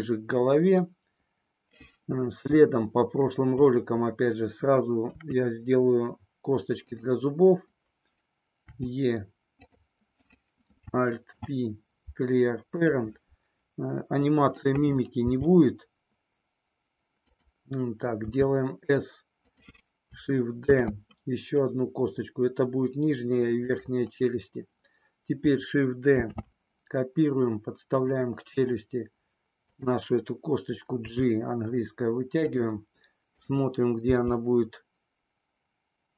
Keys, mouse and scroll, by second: 2.9 shift+middle click, 4.9 KP_3, 6.8 click, 8.7 e, 11.3 alt+p, 15.2 g, 17.2 click, 18.2 s, 20.7 shift+d, 26.2 shift+d, 28.1 click, 29.7 click, 30.9 g.